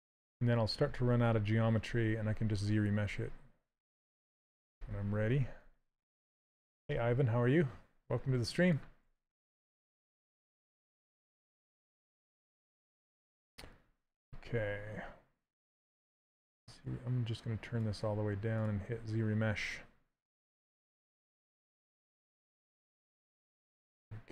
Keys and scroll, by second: 8.7 s, 13.5 2.